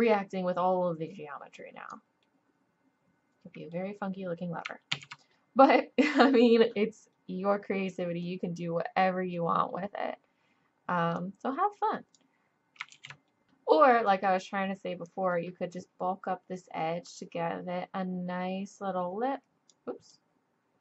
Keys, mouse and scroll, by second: 2.2-3.5 middle drag, 4.4 middle click, 4.9 ctrl+z, 9.6-11.2 middle drag, 11.2-12.9 drag, 12.9 ctrl+z, 13.4-15.0 middle drag, 15.0-16.9 drag, 20.1-20.8 drag.